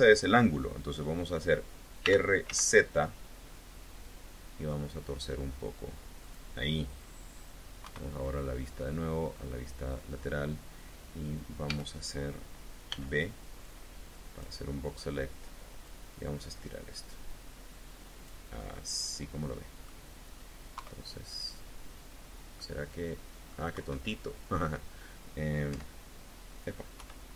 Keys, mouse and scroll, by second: 1.8 r, 2.3 z, 6.0 click, 7.6 KP_1, 9.2-9.6 scroll up 2, 11.5 a, 12.8 b, 13.4 click, 15.7-18.3 drag, 18.4-19.9 middle drag, 20.6 KP_3, 22.4-23.5 drag, 23.6 KP_1, 25.6 KP_4, 26.8 KP_1.